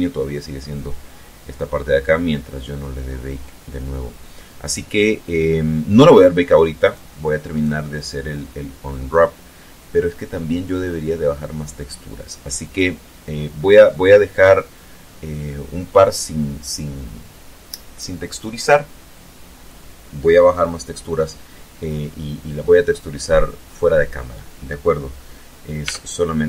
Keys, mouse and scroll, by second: 6.4 right click, 7.1 right click, 13.9 right click, 25.3 Tab.